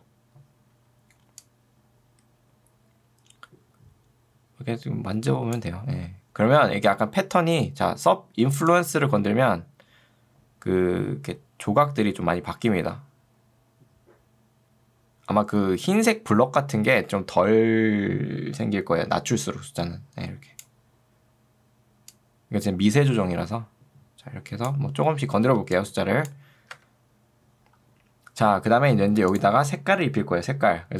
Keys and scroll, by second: 25.5 ctrl+2, 26.7 Escape.